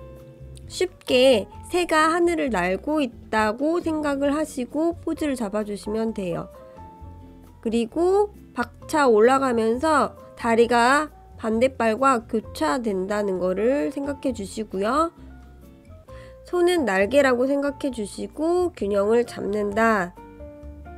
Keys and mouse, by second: 0.4-1.6 drag, 2.2 click, 2.6-4.1 drag, 4.4 click, 5.5 click, 6.5 click, 7.4 click, 7.8-10.8 drag, 11.1 click, 11.6 click, 14.8 click, 16.4 click, 17.1 shift+click, 18.7 click, 20.5-20.9 drag.